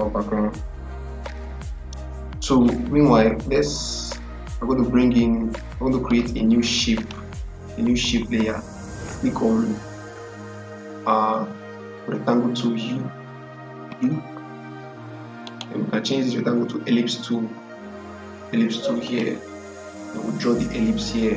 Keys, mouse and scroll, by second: 6.8 click, 13.7 u, 15.3 right click, 18.9 click.